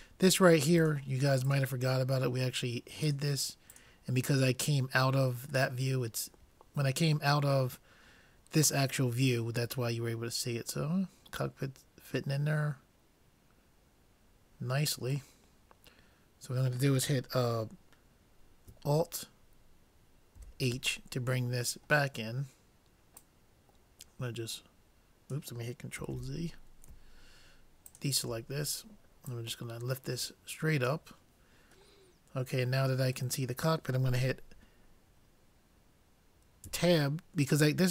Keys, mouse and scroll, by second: 0.9-4.9 drag, 5.8-7.5 middle drag, 10.1-11.3 middle drag, 20.4 alt+h, 23.2-25.0 drag, 26.2 ctrl+z, 28.0-31.1 drag, 32.2-34.1 middle drag, 36.7 Tab.